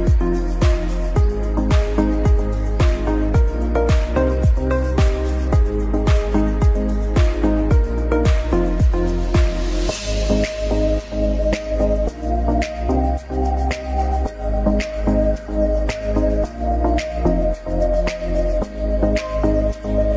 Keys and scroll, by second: 0.8 F4, 1.9 alt+c, 2.0 alt+w, 2.4 p, 3.4 shift+F2, 3.6 F3, 7.8 Escape, 8.1 F4, 11.2 shift+F2, 11.4 F3, 18.4 Escape, 19.1 Down, 19.7 F4.